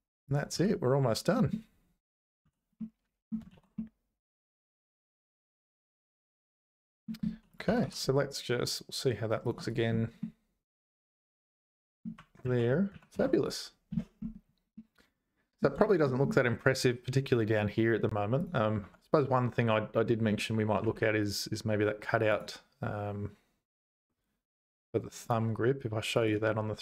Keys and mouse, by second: 0.3 click, 0.5 h, 1.3 middle click, 2.1 click, 2.4 h, 2.8 middle click, 3.5 ctrl+s, 3.7-7.1 middle drag, 7.5 click, 7.7 g, 9.7 click, 10.2-12.0 middle drag, 12.4 ctrl+z, 12.9 ctrl+z, 13.1 ctrl+s, 14.8 middle click, 15.8 shift+middle click, 18.4 click, 18.8 Tab, 20.8 3, 22.3 click.